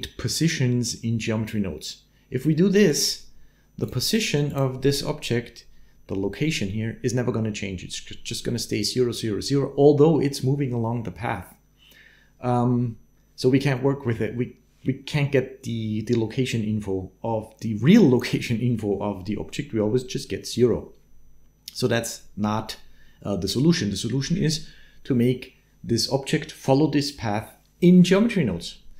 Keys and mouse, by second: 2.7 right click, 3.6 click.